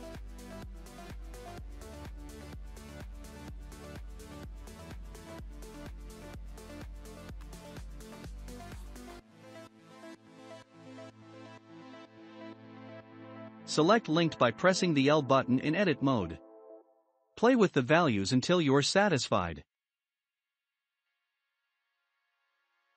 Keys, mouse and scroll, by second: 0.2 Tab, 0.9-2.0 middle drag, 2.0 3, 2.3-3.4 drag, 5.8-6.3 scroll down 4, 6.3-7.5 shift+middle drag, 7.5-10.5 drag, 11.3 middle click, 11.7-12.5 scroll up 1, 12.5-13.7 shift+middle drag, 13.7 click, 15.0 l, 15.6-17.5 scroll up 1, 17.5-18.7 shift+middle drag, 18.7-21.3 drag, 21.3-21.6 scroll down 2, 21.6-22.9 shift+middle drag.